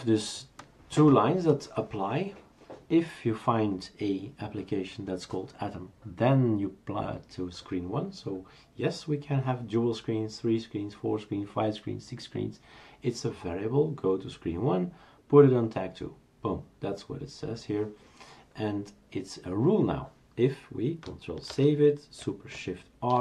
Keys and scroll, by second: 21.5 ctrl+s, 23.1 shift+super+r.